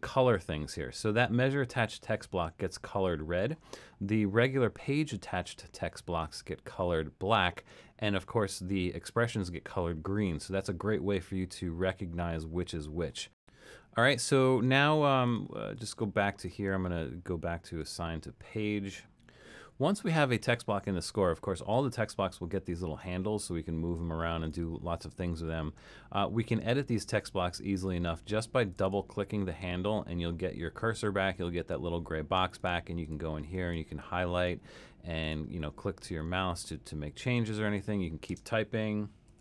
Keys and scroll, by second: 38.3-39.4 typing.